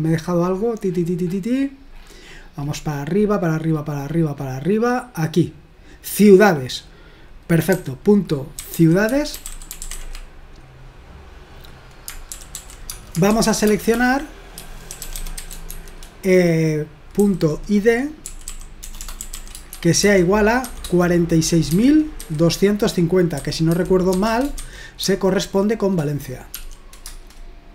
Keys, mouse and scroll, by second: 3.7-5.0 scroll up 1, 5.0-5.6 scroll down 2, 8.4-10.4 typing, 12.3-20.7 typing, 21.7-25.5 typing, 26.5 typing, 27.1 Return.